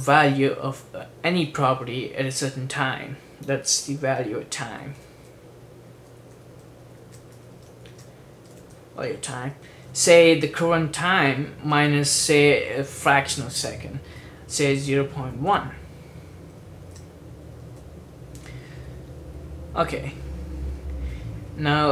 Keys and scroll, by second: 4.0-12.3 typing, 14.7-17.8 typing.